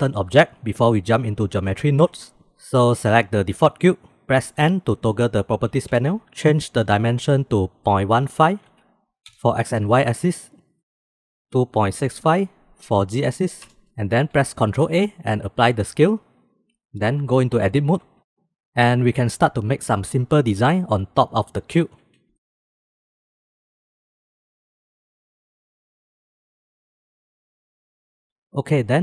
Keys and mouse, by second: 3.8 click, 4.8 n, 7.7-13.4 drag, 14.8 ctrl+a, 18.5 shift+middle click, 19.2 shift+b, 20.8 shift+middle click, 21.5 3, 22.3 shift+middle click, 23.4 i, 24.7 i, 26.3 s, 27.0 e, 27.8 click.